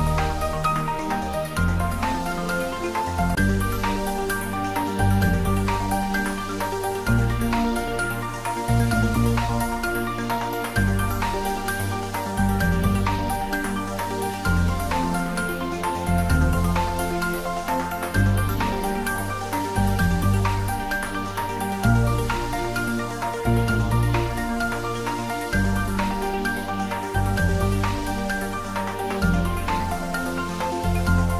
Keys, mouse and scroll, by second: 0.0 scroll up 1, 0.7-1.7 typing, 3.3-5.1 typing, 6.1 Right, 7.6 click, 8.1 scroll down 1, 9.3 middle click, 10.7 scroll down 1, 11.2 middle click, 12.3 scroll up 1, 13.2 middle click, 14.2 shift+click, 16.2 middle click, 17.6 click, 20.2 scroll up 1, 21.4 scroll down 1, 21.8-23.6 middle drag, 23.6 click, 25.5 3, 26.6 click, 26.7 click, 28.0 shift+click, 28.5 shift+scroll down 1, 29.2 scroll down 1, 30.7 shift+click.